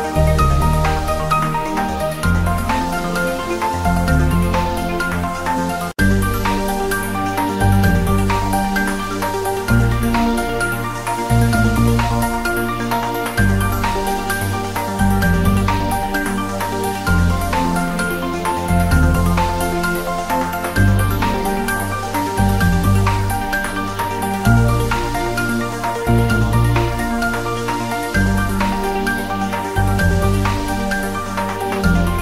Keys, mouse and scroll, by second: 0.8 s, 1.7 click, 2.3-2.6 scroll down 1, 3.3 click, 3.8 g, 5.2 click, 5.5 scroll down 1, 6.1-8.4 drag, 8.4-9.0 scroll down 1, 9.6 click, 10.7 r, 11.0 click, 11.4 g, 12.0 y, 12.1 Right, 13.6 Return, 13.8 g, 14.3 Left, 15.4 Return, 15.8 r, 16.1 click, 16.2-17.0 scroll up 1, 18.3-18.6 scroll down 1, 19.8-20.4 scroll up 1, 20.8 scroll down 1, 21.5 click, 23.7-24.3 scroll down 1, 25.1 click, 26.5 click, 27.0 scroll down 1, 27.4-27.8 scroll up 1, 27.8-29.4 drag, 31.6 ctrl+z.